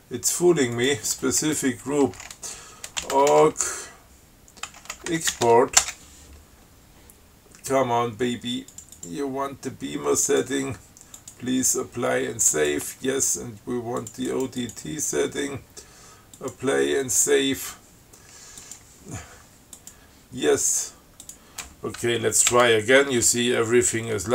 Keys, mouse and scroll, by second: 1.0 click, 3.0-6.1 typing, 9.0 click, 10.5 click, 11.4 click, 12.8 click, 14.3 click, 16.6 click, 18.9 click, 20.0 click, 21.5 click, 22.8 ctrl+c.